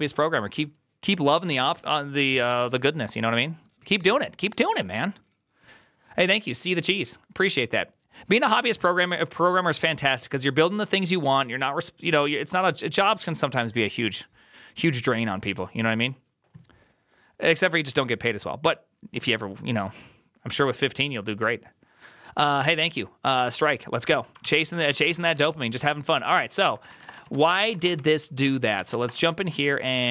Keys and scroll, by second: 24.3 alt+{, 24.3 ctrl+c, 24.4-30.1 typing, 26.7 ctrl+c, 26.9 Return, 27.1 ctrl+u, 27.3 ctrl+c, 28.3 ctrl+t, 29.8 ctrl+c.